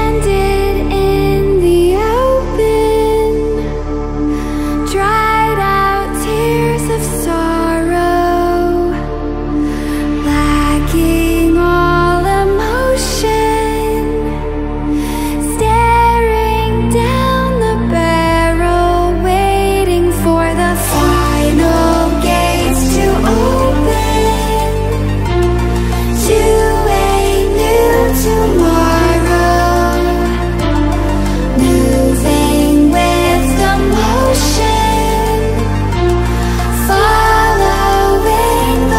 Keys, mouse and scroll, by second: 1.1 ctrl+w, 3.0 click, 4.5 ctrl+w, 6.1 ctrl+w, 7.0-16.4 drag, 18.0 ctrl+z, 18.6 click, 19.3 ctrl+alt+scroll down 1, 19.7-25.5 drag, 25.5 ctrl+w, 28.3 ctrl+w, 29.7-32.4 alt+shift+drag, 38.3 click.